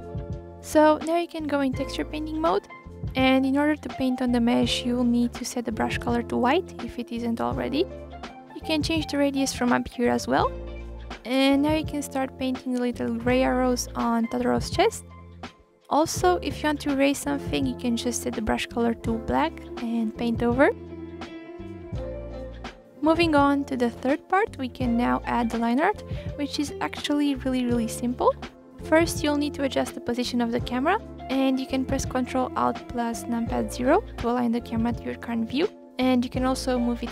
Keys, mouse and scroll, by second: 0.0 u, 2.3-3.5 drag, 3.5-4.4 scroll, 4.4-5.7 drag, 5.7 scroll down 1, 6.1 middle click, 6.3-7.1 scroll, 7.1 click, 7.6 click, 8.2-8.8 scroll down 2, 8.5 KP_1, 8.8 scroll, 9.9-11.9 drag, 11.9 ctrl+z, 12.0 ctrl+z, 12.5 click, 13.6 click, 14.4 ctrl+z, 14.7-16.7 drag, 17.7-18.9 drag, 19.3-21.2 drag, 21.2-21.6 scroll down 1, 21.6-23.6 middle drag, 26.0 click, 26.5-27.0 scroll down 8, 27.0-27.6 scroll up 2, 27.6 click, 28.0 click, 29.1-30.3 drag, 30.3 right click, 30.6 scroll down 1, 30.7-32.6 middle drag, 32.6 ctrl+alt+KP_0, 33.8-34.5 scroll down 2, 34.7 middle click, 35.0-35.3 scroll down 1, 35.3-36.2 scroll up 1, 36.2 ctrl+alt+KP_0.